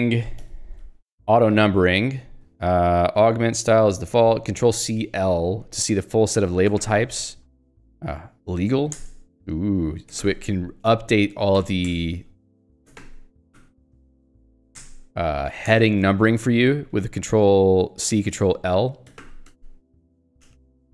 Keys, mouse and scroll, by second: 0.4 Escape, 0.9 j, 2.9 k, 6.1 h, 6.8 ctrl+l, 8.5 ctrl+j, 9.0 Return, 10.2 ctrl+l, 11.6 ctrl+j, 11.9 Return, 13.0 ctrl+l, 13.6 ctrl+k, 13.9 ctrl+j, 14.8 Return, 15.7 ctrl+g, 16.0 Escape, 19.3 ctrl+l, 20.2 ctrl+g, 20.6 ctrl+g, 20.8 Escape.